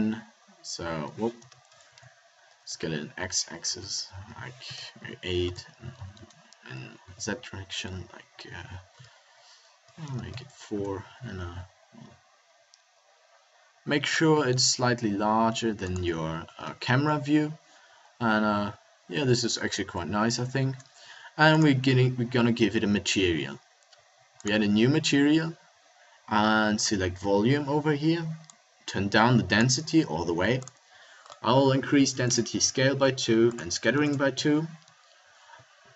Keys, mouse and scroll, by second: 2.5 s, 5.9 s, 11.4 s, 14.1-15.6 drag, 14.3 s, 16.5 KP_0, 21.5-26.3 drag, 26.8-35.9 drag.